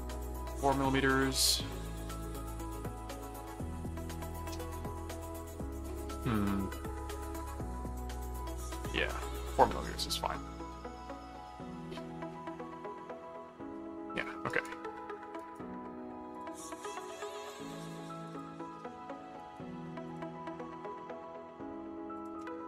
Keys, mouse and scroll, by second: 7.1 click, 8.2 click, 14.5 right click, 15.4 right click, 16.3 click, 17.2 click, 17.9 alt+click, 18.1 alt+c, 19.4 right click, 20.1 shift+click, 22.2 shift+click.